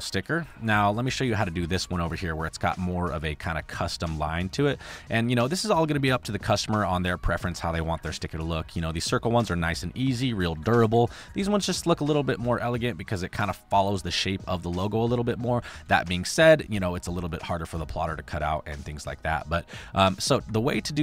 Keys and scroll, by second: 0.6 space, 8.1 space, 9.3 space, 11.0 space, 15.8 space, 16.3 space, 16.9 space, 18.9 space, 20.8 space.